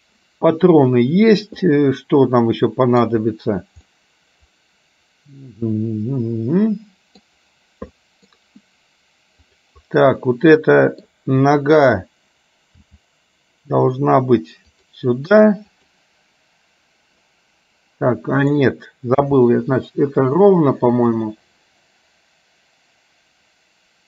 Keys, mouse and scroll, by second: 1.8-3.2 middle drag, 4.0-7.3 middle drag, 8.1 middle click, 9.5 click, 10.3 middle click, 12.8 g, 15.7 click, 18.6 click, 19.2 g.